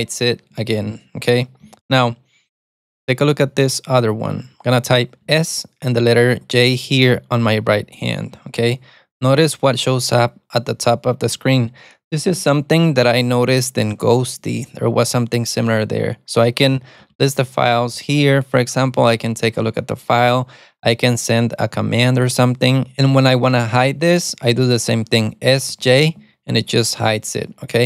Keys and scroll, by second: 0.1 alt+super+a, 1.7 Escape, 8.5 alt+super+d, 16.9-17.7 typing, 18.1 Return, 25.9 alt+super+d.